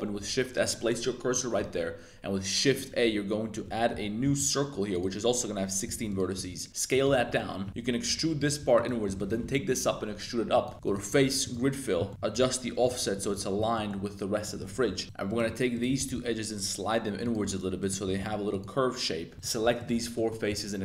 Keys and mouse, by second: 0.1 Tab, 1.7 shift+a, 3.0 Tab, 3.6 Tab, 3.9 Tab, 4.2 shift+a, 5.8 s, 6.3 s, 6.9 click, 7.1 shift+click, 7.7 s, 8.4 click, 8.7 alt+click, 9.0 e, 9.2 click, 9.4 g, 9.6 z, 10.9 click, 12.0 middle click, 12.3 click, 12.8 click, 13.7 middle click, 14.4 middle click, 15.0 2, 15.2 right click, 15.7 shift+right click, 15.9 g, 16.1 g, 17.2 right click, 17.4 1, 17.8 click, 18.0 g, 18.2 g, 18.5 click, 19.3 3, 19.7 shift+super+click, 20.1 middle click, 20.4 e.